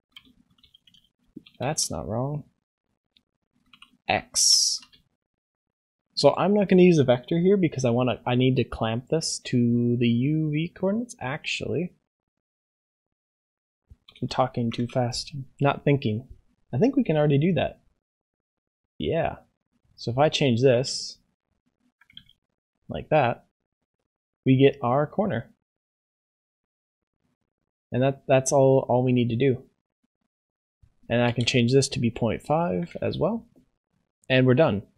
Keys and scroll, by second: 14.9 ctrl+s.